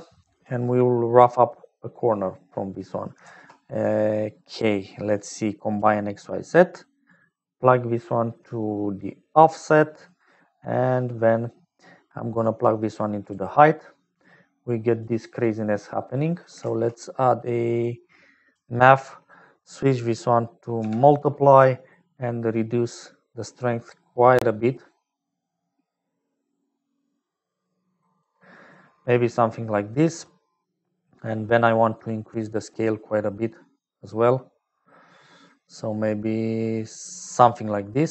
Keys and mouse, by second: 0.0-38.1 typing, 0.8 click, 1.7 click, 6.4-10.1 drag, 12.4 click, 15.0 click, 16.1 click, 19.9-21.0 drag, 23.4-24.8 shift+drag, 25.3-27.5 shift+middle drag, 32.4 click, 32.9-37.2 middle drag, 37.9 click.